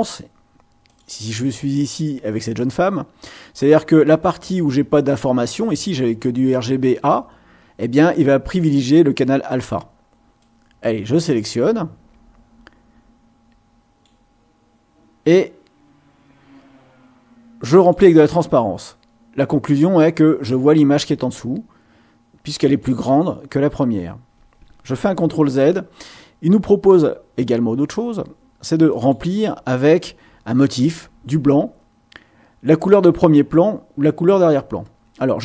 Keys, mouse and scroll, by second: 0.9 click, 10.4-14.2 drag, 17.7 click, 25.4 ctrl+z, 28.9 click.